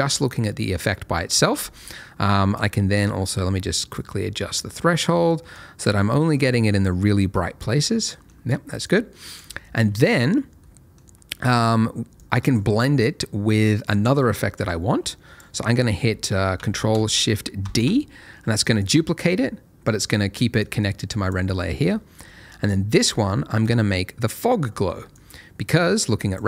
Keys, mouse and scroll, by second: 2.5 click, 5.5 click, 7.8 middle click, 8.8 click, 9.5 middle click, 12.1 click, 13.9 middle click, 14.2-14.5 scroll down 1, 14.5 middle click, 15.0 click, 17.6 ctrl+shift+d, 18.7 click, 19.2 double click, 20.6 click, 21.5 middle click, 21.9-22.6 scroll up 1, 22.6 click.